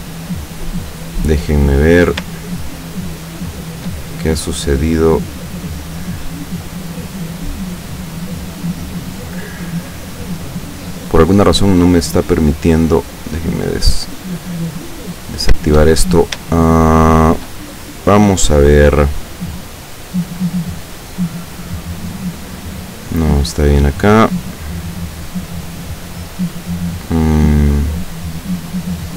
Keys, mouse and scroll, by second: 0.0 click, 1.0 click, 2.5 shift+middle click, 3.3 shift+scroll up 1, 3.5 shift+middle click, 5.5 click, 6.9 click, 7.7 click, 13.2 click, 15.3-15.7 scroll down 1, 16.1-16.5 shift+scroll up 1, 16.7-17.7 shift+middle drag, 19.7-20.8 middle drag, 21.7 click, 23.9-28.3 middle drag.